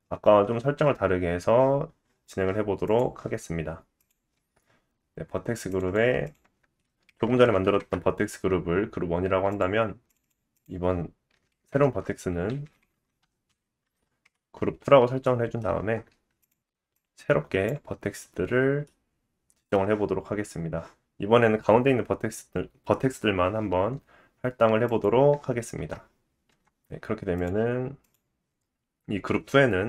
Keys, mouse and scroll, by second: 1.3-2.9 scroll down 2, 3.0-4.0 drag, 4.1-5.7 drag, 5.8 click, 7.5 KP_0, 9.5 click, 10.1 click, 10.2 click, 11.5 KP_Decimal, 12.8 Left, 12.9 Left, 15.2 middle click, 15.8 Tab, 16.5 click, 18.8 middle click, 24.9 click, 25.8 Tab, 26.5 Tab, 27.5 click.